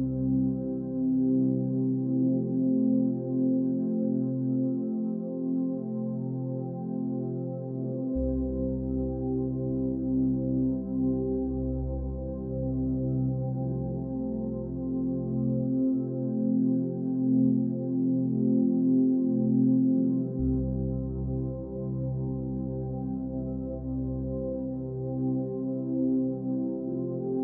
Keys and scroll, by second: 2.0 ctrl+a, 5.7 ctrl+a, 12.1 ctrl+a, 22.7 ctrl+=, 24.9 ctrl+z.